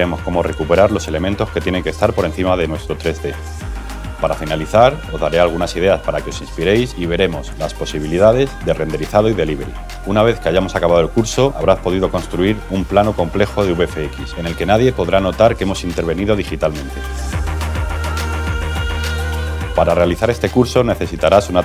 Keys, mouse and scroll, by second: 0.0 click, 3.5-5.0 typing.